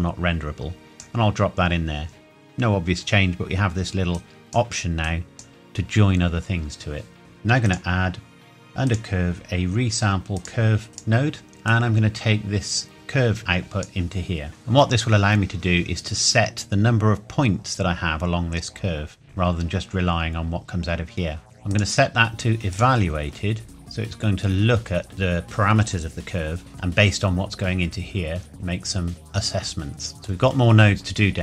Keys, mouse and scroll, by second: 4.1 click, 7.7 click, 11.7 click, 14.6 middle click, 21.7 click, 26.7 middle click, 30.1 middle click.